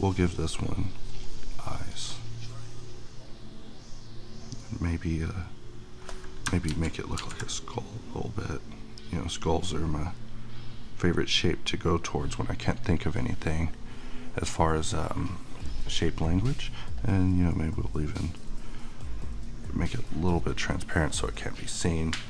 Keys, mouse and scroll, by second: 6.7 ctrl+z, 7.6-12.7 drag, 16.3-19.8 drag, 20.6 click, 22.0-22.2 middle drag.